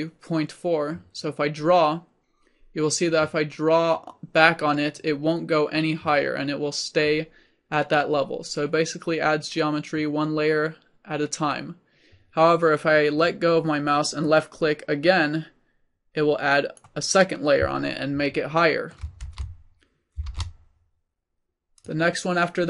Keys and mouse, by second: 1.2-3.0 drag, 14.3-16.3 drag, 16.3-18.2 middle drag, 18.2 click, 19.1-20.8 middle drag, 19.8 ctrl+z, 20.8 ctrl+z, 21.8-22.6 drag.